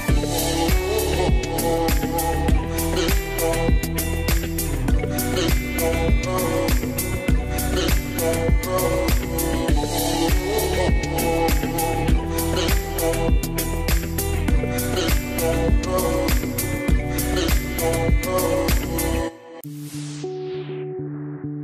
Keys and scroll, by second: 10.5 BackSpace, 10.7 1, 10.9 Return.